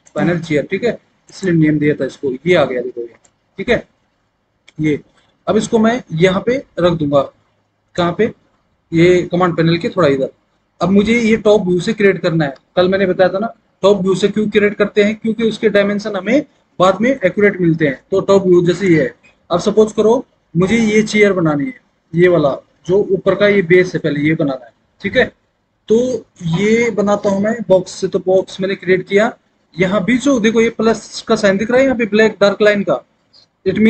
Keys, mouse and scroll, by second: 1.2 click.